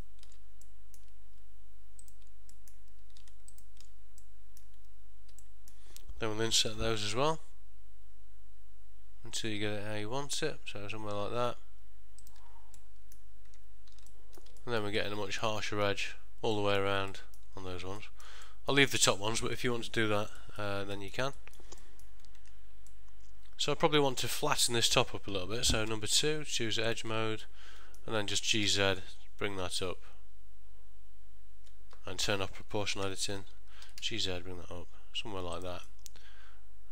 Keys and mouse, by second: 0.0 ctrl+shift+click, 0.8 middle click, 2.1 shift+click, 2.7 middle click, 3.6 ctrl+shift+click, 4.4 middle click, 5.5 middle click, 7.5 i, 12.9 middle click, 13.6 Tab, 14.2 ctrl+middle click, 14.7 shift+middle click, 15.1 middle click, 16.7 middle click, 17.6 ctrl+middle click, 18.1 shift+middle click, 18.6 middle click, 19.7 middle click, 20.5 middle click, 21.1 middle click, 21.5 shift+middle click, 21.9 middle click, 22.5 Tab, 23.0 middle click, 26.0 2, 27.0 alt+click, 27.5 middle click, 28.6 g, 33.2 o, 36.0 middle click.